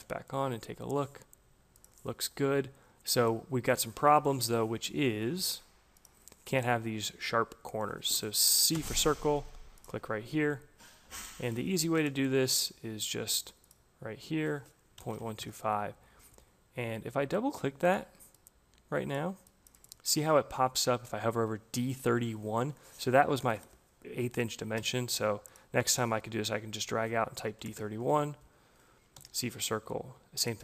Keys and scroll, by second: 8.0 c, 14.5 Delete, 14.7-15.5 typing, 22.8 Return, 24.6 c, 27.2 d, 27.5 1, 27.6 Return, 29.0 c.